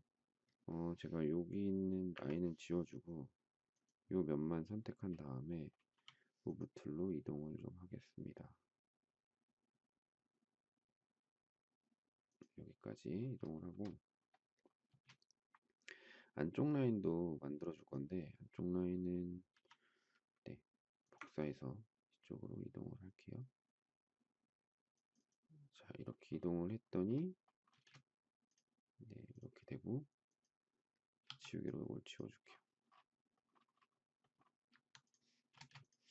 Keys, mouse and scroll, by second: 1.9 Delete, 5.9 m, 13.5 shift+middle click, 14.9 space, 19.5 m, 27.7 space, 31.2 e, 34.6 Escape, 35.5 space.